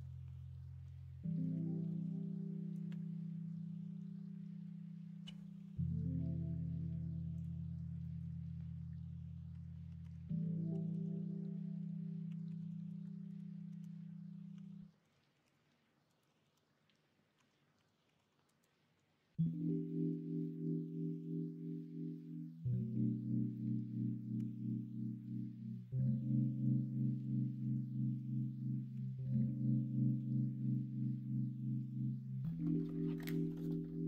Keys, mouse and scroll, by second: 8.0 middle click, 10.0 Tab, 10.7 KP_1, 10.8 KP_3, 12.3 r, 13.2 Return, 13.6 ctrl+z, 14.5 r, 16.4 ctrl+z, 17.3 r, 24.3 g, 27.8 shift+middle click, 28.9 s.